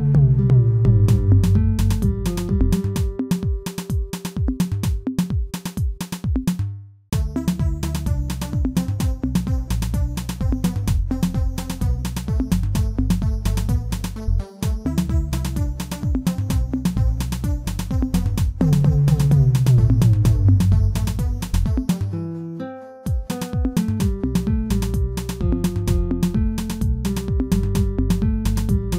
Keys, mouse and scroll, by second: 0.1 click, 0.5-2.4 right drag, 2.4 Tab, 2.8 shift+middle click, 3.2 a, 3.9 Tab, 5.1 shift+d, 6.0 s, 10.0 h, 10.4 click, 10.8 Tab, 11.4 shift+middle click, 12.0 alt+click, 12.5 shift+middle click, 13.0-13.3 scroll up 1, 13.3-16.7 shift+middle drag, 16.9 a, 17.8 s, 27.7 alt+click, 28.1 shift+middle click, 28.7-28.9 scroll up 1.